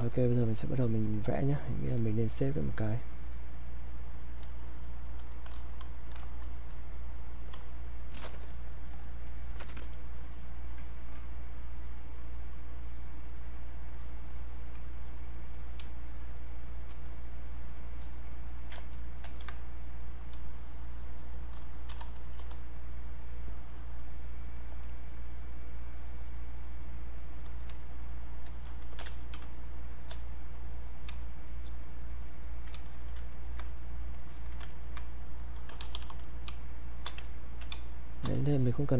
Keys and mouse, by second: 1.8 click, 5.6 shift+-, 9.0 click, 12.0 click, 12.8 click, 15.8 space, 16.2 click, 16.3 space, 17.1 click, 17.7 click, 19.5 ctrl+z, 21.3-22.8 typing, 24.8 click, 28.7-29.9 typing, 29.8 click, 30.3 click, 31.1 space, 31.4 click, 31.6 space, 31.9 click, 32.9 alt+click, 33.3 ctrl+right click, 33.8 click, 34.3 alt+click, 34.7 ctrl+right click, 35.1 click, 35.5-38.2 typing, 36.9 click, 38.1 click, 38.5 alt+click.